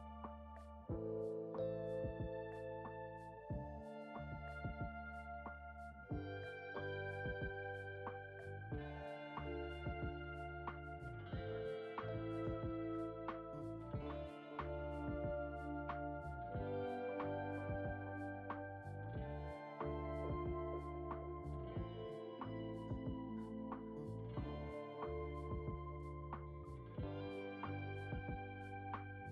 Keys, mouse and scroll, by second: 4.9 click, 9.1-10.0 middle drag, 10.0-10.7 scroll up 5, 10.8-13.4 shift+middle drag, 13.4 click, 15.9 s, 17.1-17.4 scroll down 1, 17.5-19.4 shift+middle drag, 19.4-22.3 drag, 22.8-24.5 middle drag, 24.5 Tab, 25.4 click, 26.4-27.6 shift+middle drag, 27.6-29.3 drag.